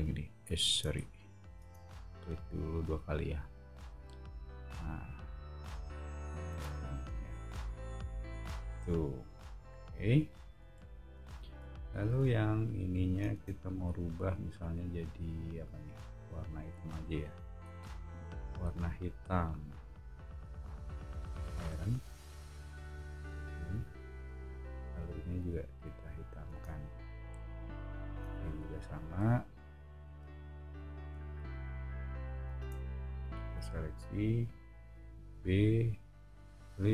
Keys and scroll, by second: 1.0 super+z, 1.5 space, 5.5 b, 6.5 space, 9.3 o, 13.3 space, 17.6 b, 26.5 space, 28.5 o, 32.5 space, 35.2 b.